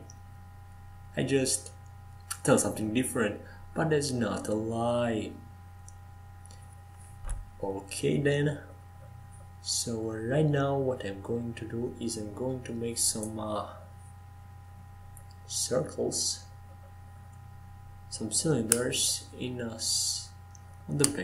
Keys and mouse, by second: 0.5 ctrl+z, 1.0 ctrl+z, 1.5 ctrl+z, 1.9 ctrl+z, 2.6 ctrl+z, 3.2 ctrl+z, 4.1 Tab, 6.7 ctrl+z, 7.7 ctrl+z, 10.3 Tab, 11.3 ctrl+z, 11.5 ctrl+z, 11.9 ctrl+z, 12.1 ctrl+z, 12.3 ctrl+z, 12.5 ctrl+z, 16.2 Tab, 17.4 ctrl+z, 17.8 ctrl+z, 18.0 ctrl+z, 20.4 shift+a.